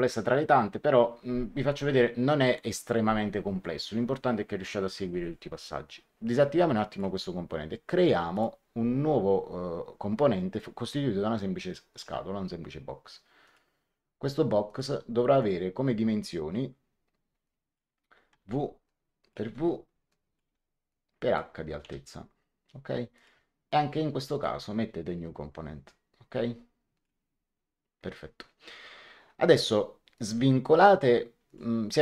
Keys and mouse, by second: 6.8 click, 8.2 click, 11.8 click, 13.4 click, 14.6 click, 17.4 click, 18.2 w, 18.8 click, 19.4 w, 20.0 click, 20.4 w, 20.8 click, 21.7 h, 23.1 click, 24.2 click, 26.9 click, 30.1 click, 31.4 click.